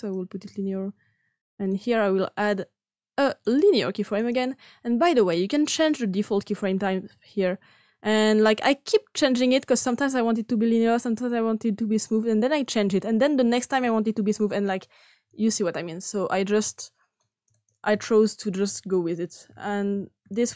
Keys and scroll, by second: 19.4-20.1 typing.